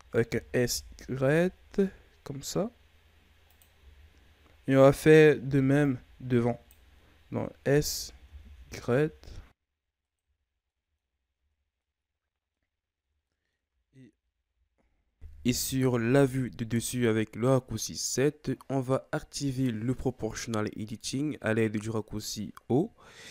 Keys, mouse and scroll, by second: 0.2 s, 3.7 z, 4.9 right click, 5.3 b, 7.6 s, 10.1 z, 10.4 scroll down 2, 10.6 middle click, 11.3 Tab, 11.6 scroll down 1, 11.7 middle click, 12.6 scroll up 1, 12.9 Tab, 13.1-15.4 middle drag, 15.4 alt+right click, 15.9-18.4 middle drag, 18.4 o, 19.6-22.6 drag.